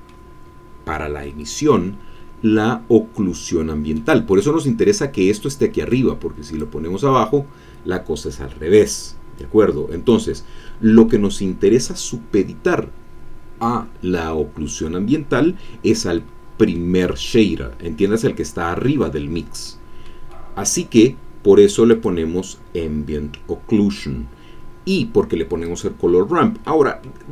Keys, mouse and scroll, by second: 1.2 middle click, 2.1-3.9 scroll up 2, 3.9 middle click, 5.9 click, 9.4 click, 11.1-12.2 middle drag, 16.1-17.4 middle drag, 19.7 middle click, 20.3 scroll down 1, 21.9 click, 25.6 click, 26.6 middle click.